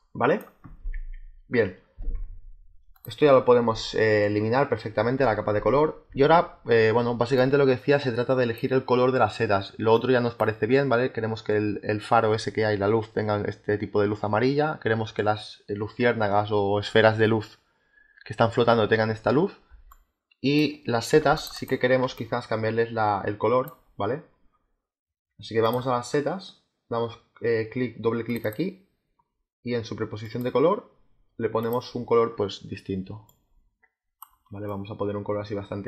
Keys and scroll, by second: 4.3 Delete, 19.6 space, 21.0 z, 21.9 space.